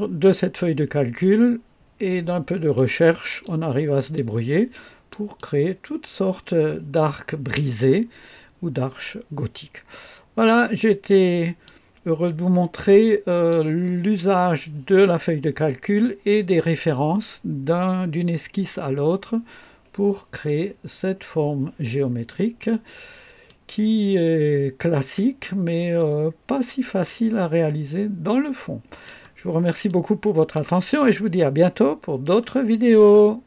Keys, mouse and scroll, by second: 2.7-3.5 drag, 3.9 click, 4.4 click, 5.9 click, 7.8-11.8 drag, 12.2-13.6 drag, 22.1 scroll up 2, 23.4-29.2 drag, 29.8-30.6 drag, 32.2 right click, 33.4 click.